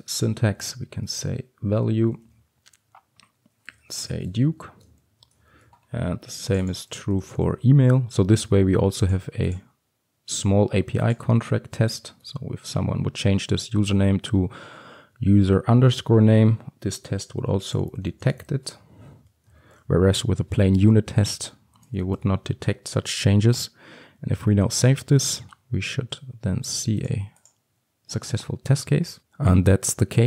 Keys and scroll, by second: 1.8 Return, 5.6 ctrl+d, 20.7 ctrl+alt+l, 21.9 ctrl+x, 22.2 ctrl+alt+l, 22.5 ctrl+s.